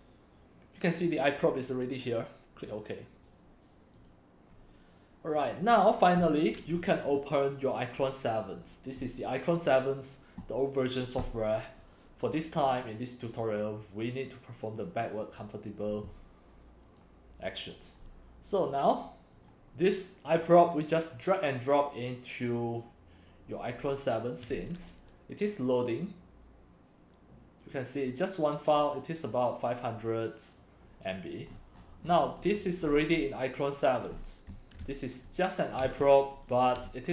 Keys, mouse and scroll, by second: 0.0-3.2 drag, 5.7-7.0 drag, 7.2 click, 7.6-9.9 drag, 18.1 click, 18.3 click, 18.6 click, 19.5-28.6 drag, 28.9-31.5 drag, 31.5-32.6 scroll down 11, 32.6 right drag, 32.9-33.5 scroll, 34.1 scroll, 34.2-35.3 typing, 34.6-35.4 drag, 36.4 click, 36.5 click, 36.9 x.